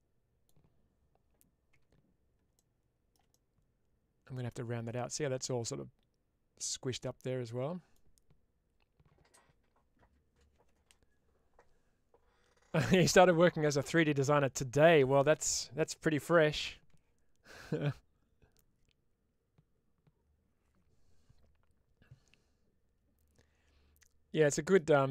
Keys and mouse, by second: 3.2-4.2 middle drag, 4.9 middle click, 7.1-7.8 middle drag.